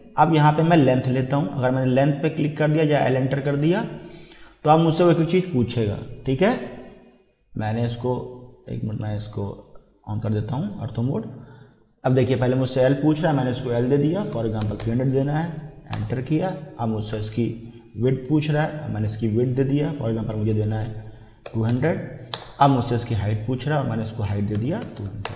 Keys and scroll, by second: 14.4 3, 14.6 0, 15.9 Return, 21.2-22.2 typing, 22.4 Return, 24.6 2, 24.8 0, 25.2 Return.